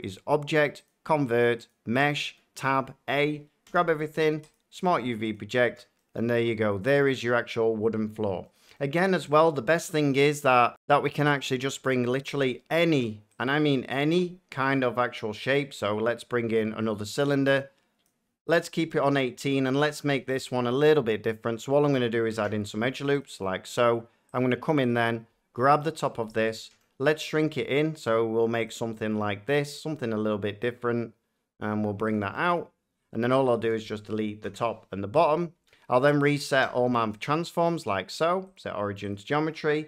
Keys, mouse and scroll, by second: 0.8 click, 1.6 click, 2.1 Tab, 2.6 a, 3.6 u, 4.5 click, 5.3 click, 5.6 Tab, 7.2 middle click, 8.6 middle click, 12.2 a, 13.3 click, 15.5 click, 18.0 click, 18.8 shift+middle click, 19.3 middle click, 19.8-20.2 shift+scroll down 2, 20.1 Tab, 22.3 ctrl+r, 23.2 click, 23.4 middle click, 24.3 click, 24.8 click, 25.7 click, 26.6 s, 28.6 click, 29.0 middle click, 29.5 click, 29.8 s, 32.1 click, 32.4 scroll down 1, 33.5 shift+click, 34.4 Delete, 35.2 click, 35.5 Tab, 36.5 ctrl+a, 37.2 click, 37.6 middle click, 38.6 click, 39.0 click.